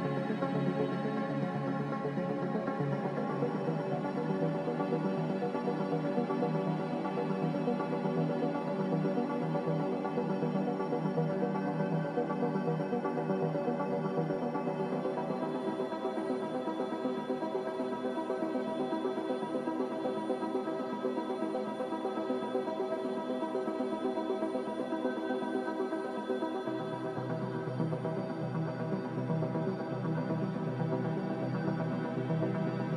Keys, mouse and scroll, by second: 15.8 click, 16.5 click, 27.5 n.